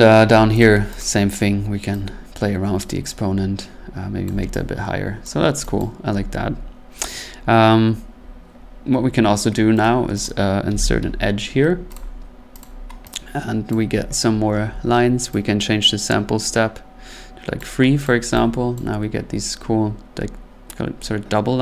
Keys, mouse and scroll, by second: 0.6 click, 1.0 click, 4.2 click, 5.2 click, 5.8 click, 9.8 right click, 10.2 click, 10.7 e, 11.9 click, 11.9 typing, 12.6 click, 13.7 click, 17.5 click, 18.0 click, 18.7 click.